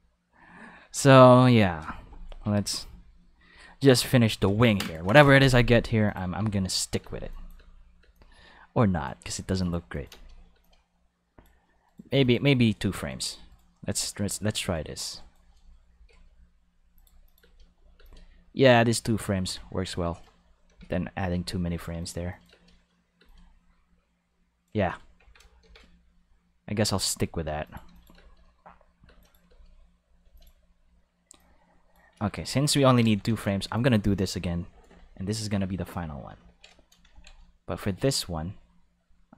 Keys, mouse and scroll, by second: 0.9 click, 1.6 click, 2.5 click, 2.9 click, 3.4 click, 4.2 click, 6.0 click, 6.3 space, 7.0 space, 7.3 click, 7.5 space, 7.9 space, 8.1-9.0 drag, 9.5 x, 9.5 click, 9.9 click, 10.0 space, 10.5 space, 10.6-11.4 drag, 11.8 right click, 12.1 x, 12.2 click, 12.6 right click, 12.9 shift+right click, 13.4 right click, 13.9 right click, 14.5 shift+right click, 15.1 shift+right click, 15.9 shift+d, 16.9 click, 17.2 click, 17.3 space, 17.9 space, 18.0-19.6 drag, 19.5 a, 20.6 shift+d, 21.9 click, 22.3 click, 22.4 space, 23.1 space, 25.1 a, 25.6 shift+d, 27.6-28.1 drag, 28.1 space, 29.0 space, 29.1 click, 29.4 space, 30.2 space, 30.3 click, 31.3-31.9 drag, 32.1 a, 32.3 x, 32.4 click, 32.8 ctrl+s, 33.2 ctrl+Tab, 36.5 ctrl+middle click.